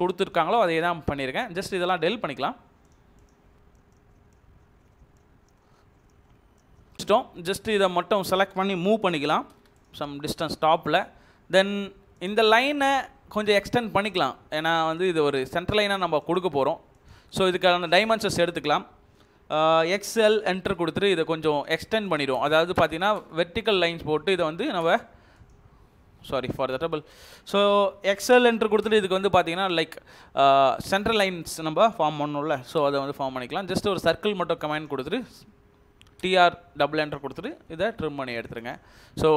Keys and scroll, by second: 9.4 m, 9.5 space, 14.2 Escape, 15.6 Escape, 17.6 Escape, 19.8-20.6 typing, 22.1 Escape, 22.3 space, 22.7 space, 23.2 space, 24.6 Escape, 24.8 space, 25.9 Escape, 26.8 Delete, 28.1-28.8 typing, 31.0 Escape, 32.6 typing, 35.0 Escape, 35.7-36.5 typing, 38.8 Escape.